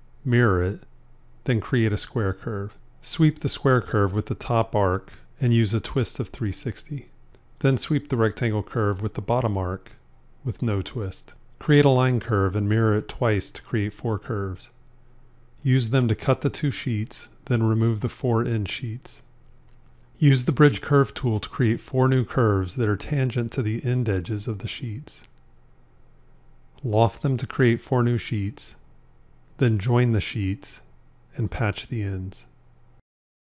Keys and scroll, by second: 0.0 alt+x, 13.8 alt+x, 15.8 c, 17.5 c, 26.9 l, 30.8 j.